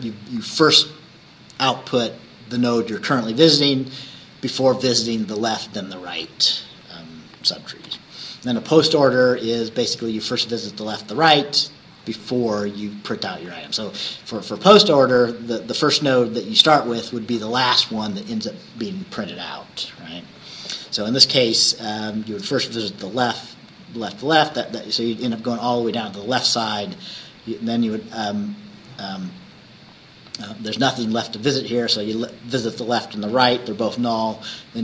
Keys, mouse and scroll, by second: 7.9 Right.